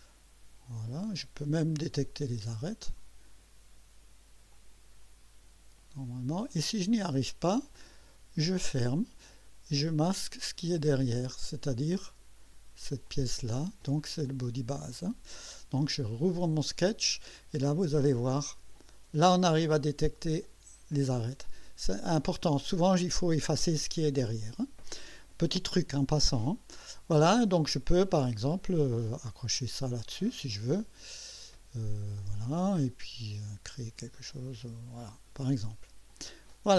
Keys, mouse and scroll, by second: 1.0 click, 2.9 click, 4.5 click, 6.1 click, 7.7 click, 11.8-12.4 drag, 13.0 click, 14.3 click, 14.8 space, 16.5 click, 18.8 click, 20.3 click, 28.0 right click, 29.1 click, 30.0 click, 32.2 click, 34.0-35.4 drag, 36.1 click.